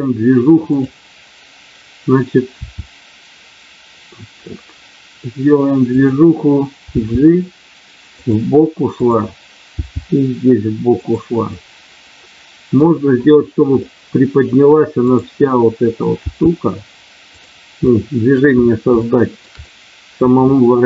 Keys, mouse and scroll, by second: 2.4 r, 5.9 click, 6.8 g, 8.2 click, 8.9 click, 10.9 click, 11.4-12.4 scroll up 1, 12.4 scroll up 1, 12.6 middle click, 13.8 middle click, 16.1 g, 17.8-18.3 scroll up 1, 18.9 scroll up 1, 19.1 shift+middle click, 19.6 middle click.